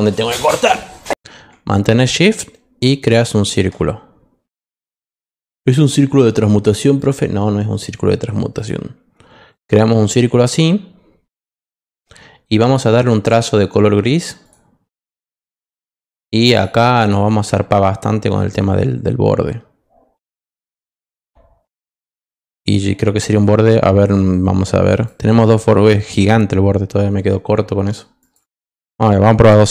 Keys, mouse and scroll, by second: 2.3-3.5 shift+drag, 6.9 click, 8.5 click, 11.6 click, 12.6 click, 13.0 -, 14.4 click, 16.5 click, 16.9 click, 18.3 click, 20.6 click, 21.8 click, 24.9 click, 28.2 click, 28.4 click, 28.7 click, 29.6-29.7 typing.